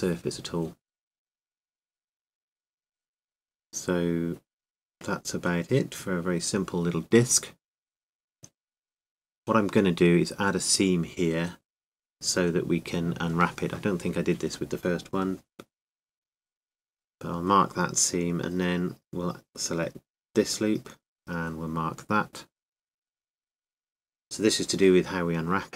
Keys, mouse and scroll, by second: 1.2 KP_7, 3.5-5.0 middle drag, 7.3 Tab, 10.8-14.6 right drag, 14.6 space, 19.6-21.2 middle drag, 21.5-23.5 right drag, 23.5-25.1 middle drag.